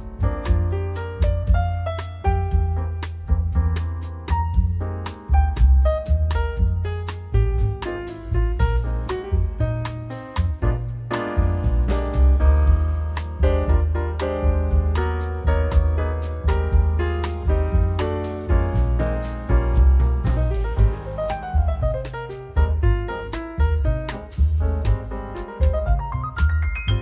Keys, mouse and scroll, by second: 2.6-3.5 drag, 5.2 9, 6.6 click, 8.8-10.4 typing, 11.0 click, 12.9 click, 14.3 Delete, 15.2 click, 15.6 Delete, 16.9 scroll down 1, 17.3-18.0 scroll up 4, 18.2-21.0 drag, 21.2 0, 22.8-24.2 drag, 26.1 click.